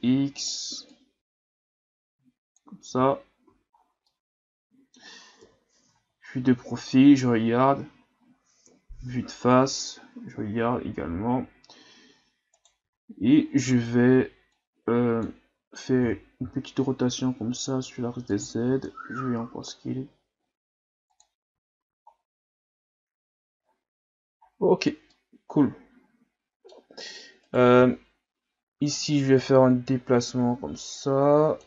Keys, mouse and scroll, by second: 0.9-2.9 drag, 2.9 Tab, 3.4 a, 3.8 scroll down 1, 4.1-5.4 middle drag, 5.4 KP_3, 6.1-7.1 scroll up 4, 7.1-7.7 scroll up 1, 7.7-8.0 scroll up 1, 8.0-8.6 scroll down 1, 8.6 KP_1, 10.3-10.7 scroll down 5, 11.0-11.4 scroll up 5, 12.6 right click, 12.8 Tab, 14.6-16.0 drag, 16.0 r, 18.7 s, 21.5 Tab, 21.8 a, 22.1-23.0 scroll down 4, 23.0-23.6 scroll down 1, 23.6-24.5 scroll up 9, 24.5-25.1 scroll down 2, 25.1-27.1 middle drag, 27.1 right click, 27.4 right click, 27.8 Tab, 29.4-31.6 drag.